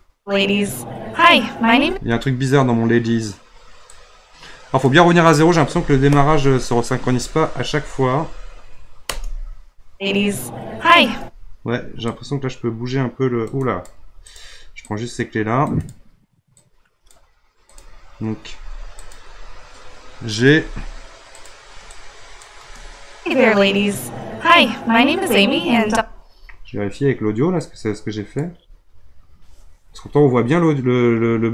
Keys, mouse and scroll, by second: 1.8 space, 3.9-5.7 drag, 5.7 Right, 5.9 Right, 6.1 Right, 7.4 Left, 9.0 space, 11.1 space, 12.1-13.6 drag, 14.2 click, 14.9-15.9 drag, 16.6-17.8 drag, 19.0 shift+click, 20.5 g, 22.0 click, 22.6 space, 25.8 space, 27.7-30.9 drag.